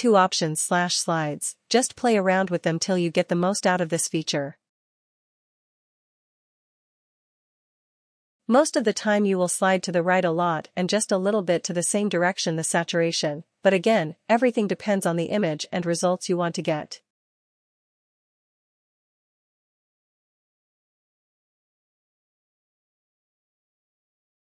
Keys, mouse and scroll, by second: 1.3-12.9 drag, 14.7-19.0 drag, 20.7 click, 23.0 click.